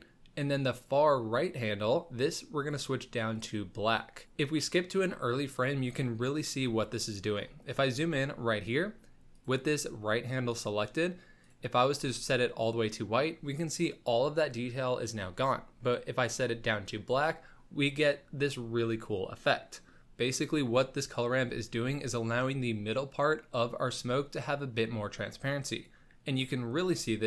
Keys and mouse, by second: 0.7 click, 4.4 click, 4.9-5.3 middle drag, 5.5-6.0 middle drag, 7.2 shift+middle click, 10.5 click, 11.4 click, 24.3-25.8 drag, 26.4-26.8 drag.